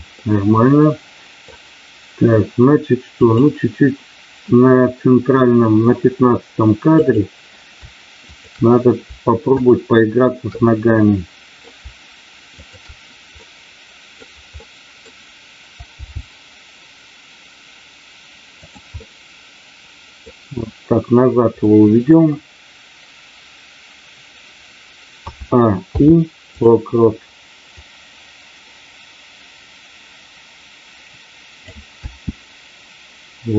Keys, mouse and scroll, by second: 0.2-1.5 middle drag, 3.1 click, 7.0 click, 8.4 shift+click, 9.5 shift+click, 10.6 middle click, 12.5 shift+click, 13.4 middle click, 14.6 middle click, 16.0 g, 18.5 click, 18.9-20.3 middle drag, 21.6 middle click, 25.8 i, 27.7-31.7 drag, 32.0 space.